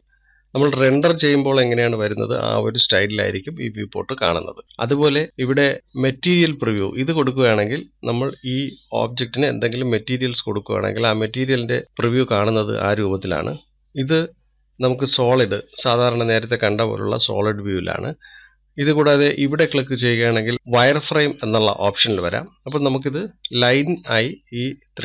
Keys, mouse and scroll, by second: 0.0 click, 1.1-2.6 middle drag, 2.6 scroll up 2, 3.4-3.8 scroll down 1, 4.1-7.5 shift+middle drag, 7.5 click, 8.7-11.7 middle drag, 16.2 click, 16.9-18.5 middle drag, 18.5-18.9 scroll down 2, 18.9-22.7 middle drag, 22.7 click, 23.9-24.9 middle drag, 24.9-25.0 scroll up 1.